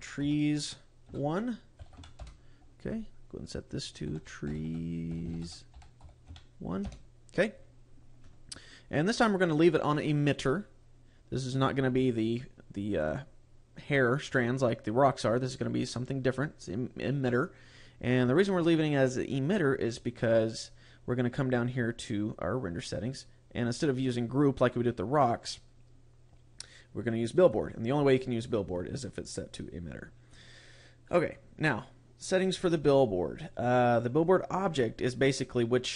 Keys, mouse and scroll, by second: 3.5 click, 18.2-19.4 scroll down 1, 19.4-21.4 scroll down 8, 21.4-23.2 scroll down 6, 27.2 click, 28.5-29.1 scroll up 6, 29.5-30.8 scroll down 12.